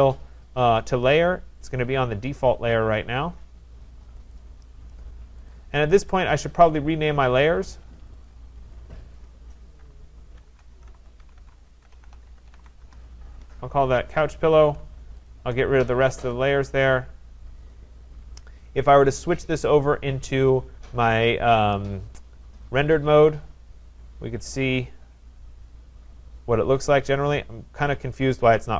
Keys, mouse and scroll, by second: 4.3 click, 5.5 click, 6.8 click, 7.6 click, 8.2 click, 8.4 click, 9.2 click, 10.2-13.1 typing, 14.5 click, 15.3 shift+click, 15.6 typing, 16.2 click, 17.7 click, 19.4 click.